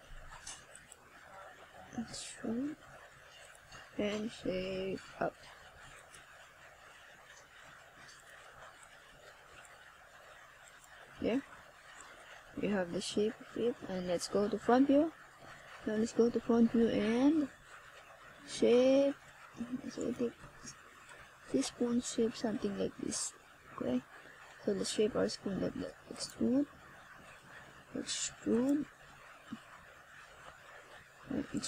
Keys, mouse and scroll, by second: 0.0-0.5 scroll up 2, 1.7 KP_0, 2.8 KP_1, 3.9 middle click, 5.8 r, 7.0 click, 7.2-7.7 scroll up 1, 7.7 r, 12.2 click, 13.6 click, 17.0 middle click, 18.2 KP_0, 30.7 right click.